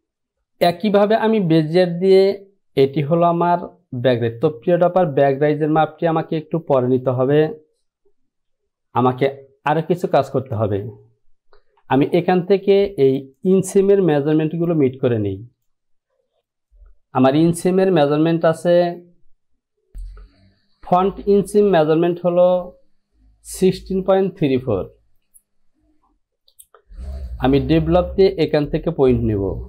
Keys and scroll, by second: 9.1 ctrl+z, 11.6 Home, 14.4 Return.